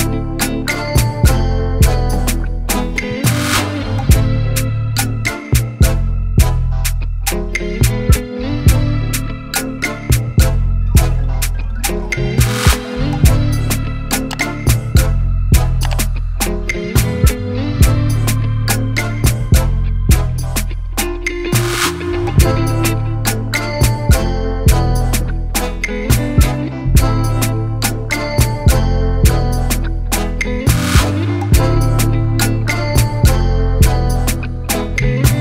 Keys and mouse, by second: 0.1 click, 0.2 click, 0.7 click, 1.7 click, 3.1 shift+Down, 10.0 shift+click, 10.6 ctrl+y, 11.4 ctrl+t, 13.3 click, 14.8 click, 16.8 click, 20.7 click, 26.4 Down, 27.1 shift+Down, 28.3 ctrl+z, 28.7 Down, 29.9 Down, 30.4 Up, 31.1 Return, 32.6 click, 33.2 click, 33.6 click, 34.3 click, 34.9 click.